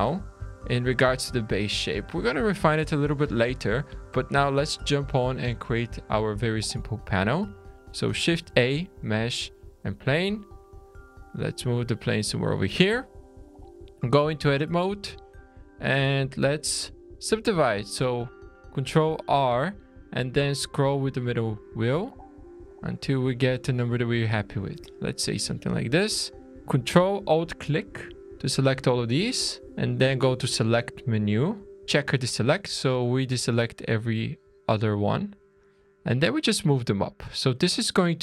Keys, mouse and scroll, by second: 0.1 scroll down 3, 0.5 shift+middle click, 5.7-7.9 scroll up 4, 8.2 shift+a, 10.7 click, 11.9-12.5 scroll up 5, 13.1 Tab, 14.5 middle click, 16.5 ctrl+r, 25.4 alt+a, 26.6 ctrl+alt+click, 30.2 click, 31.8 click, 34.6 click, 37.5 middle click, 38.0-38.2 scroll down 1.